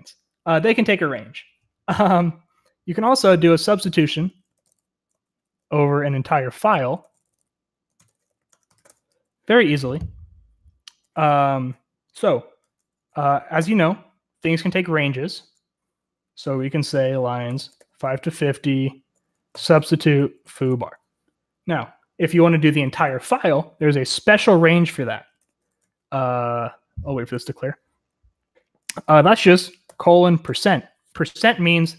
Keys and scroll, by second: 4.1-9.3 typing, 13.7 typing, 17.4-17.7 typing, 19.5-20.6 typing, 24.2 BackSpace, 24.3 BackSpace, 24.5-25.3 BackSpace, 30.4 typing.